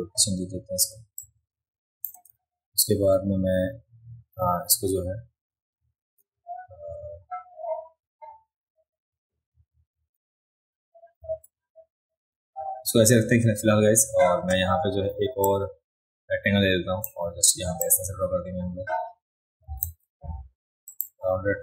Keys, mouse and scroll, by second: 1.2 shift+click, 11.2 ctrl+z, 15.5-17.0 drag, 17.8-19.8 drag, 19.8 ctrl+z, 20.9 click.